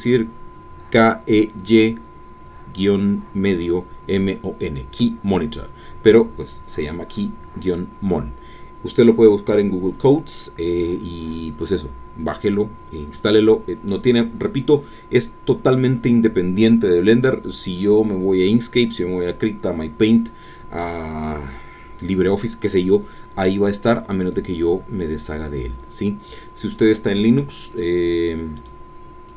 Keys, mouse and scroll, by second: 28.5 right click, 29.3 click.